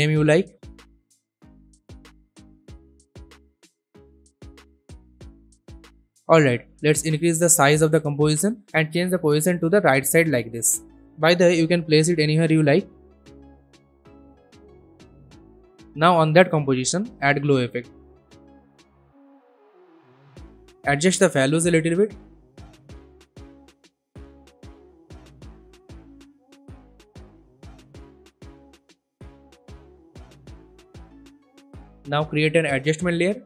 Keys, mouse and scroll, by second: 0.0-0.9 typing, 1.1 Return, 2.2 alt+scroll down 1, 3.1 alt+scroll up 1, 4.0 click, 4.5-5.5 alt+scroll down 2, 5.5 click, 5.8 s, 6.5-8.7 drag, 9.2-10.8 drag, 15.8 click, 17.1-18.3 typing, 19.2-22.4 drag, 32.3 right click, 32.8 click.